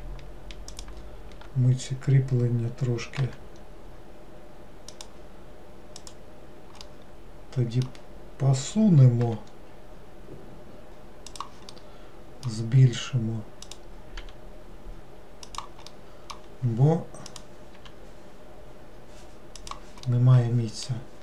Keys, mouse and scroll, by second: 0.8 shift+click, 6.1 click, 6.9-9.3 middle drag, 9.3 g, 11.8-13.7 middle drag, 13.7 click, 16.0-17.4 middle drag, 17.4 click, 20.2-21.2 middle drag.